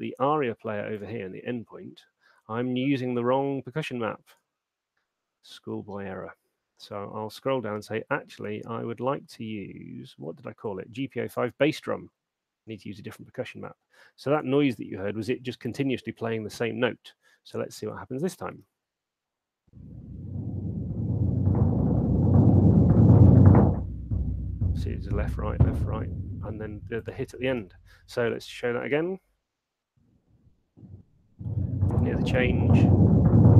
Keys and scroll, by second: 18.7 alt+shift+space, 27.6 space, 29.1 alt+shift+space.